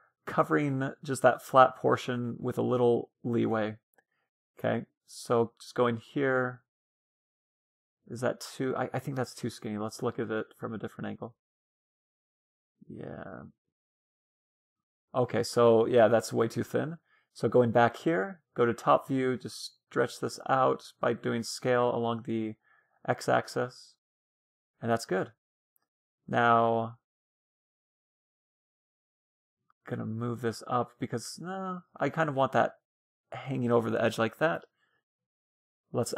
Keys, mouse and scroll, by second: 0.6-0.9 scroll up 1, 2.7-6.5 middle drag, 5.1 a, 5.5 s, 8.5-12.0 middle drag, 14.4-16.3 middle drag, 17.9-20.3 middle drag, 18.9 s, 21.0 a, 21.1-23.8 middle drag, 24.8-26.8 middle drag, 25.4 a, 25.7 a, 26.2 b, 28.8-30.8 drag, 30.8 Tab, 31.7-33.7 middle drag, 35.5-36.1 drag.